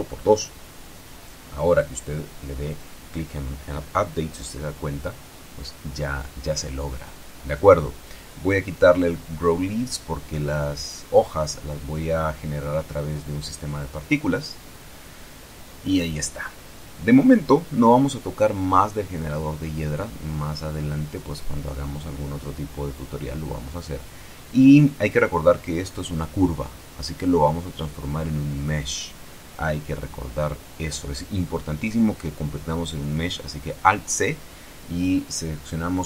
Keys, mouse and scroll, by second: 4.3-6.0 scroll down 2, 6.9-7.9 scroll up 2, 11.3 click, 13.2-13.9 scroll up 2, 14.0 click, 16.7-18.0 middle drag, 18.0-18.5 scroll up 1, 19.0 shift+middle click, 19.7 shift+right click, 20.7-21.1 scroll up 2, 21.3-22.5 shift+middle drag, 23.0 Tab, 24.8 Tab, 25.7 scroll down 2, 27.2 scroll down 2, 32.9 alt+c.